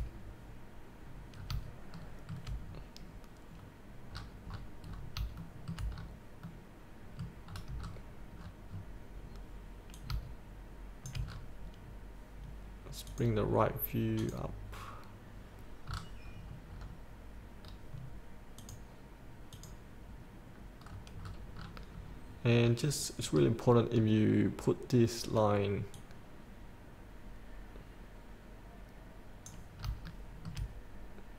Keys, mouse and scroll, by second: 0.4-1.6 scroll down 1, 1.6 scroll up 1, 2.2 shift+middle click, 2.9-3.3 scroll down 1, 3.8-4.3 scroll down 1, 4.3 scroll up 1, 5.5 shift+scroll up 1, 6.2-6.7 scroll up 1, 6.7 middle click, 7.7 scroll down 1, 10.2-11.4 drag, 11.5-12.2 scroll up 1, 12.4-13.3 scroll up 1, 13.3 click, 16.1-16.7 scroll down 1, 18.8 click, 21.1-21.5 scroll down 1, 23.6-24.2 scroll up 1, 24.2-26.2 scroll down 1, 26.2-30.0 drag, 30.0 scroll up 1, 30.3 shift+middle click.